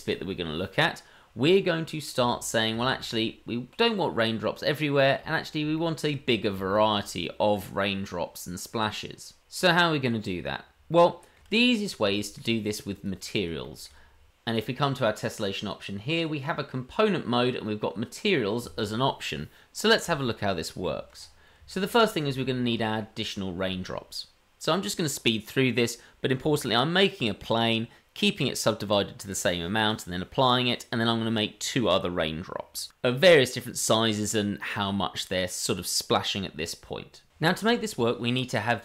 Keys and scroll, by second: 21.6 shift+a, 22.1 ctrl+4, 22.4 shift+d, 22.6 shift+d, 22.8 Tab, 26.5 g, 26.9 g, 27.9 ctrl+r, 28.1-29.9 typing, 28.5 Tab, 28.8 Tab, 29.2 Tab, 29.6 Tab, 30.0 Tab, 31.4 f, 32.5 Tab, 32.7-34.8 typing, 35.9 Tab, 36.2 m, 36.3 Tab.